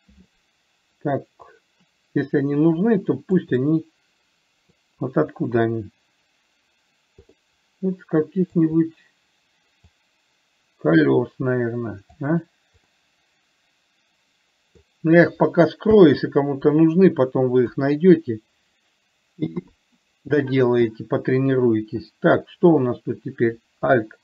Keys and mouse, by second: 1.9-3.7 drag, 3.9-5.2 middle drag, 7.7-9.0 middle drag, 10.2-12.5 drag, 13.2-15.2 middle drag, 16.2 h, 18.0 KP_1, 20.0 KP_3.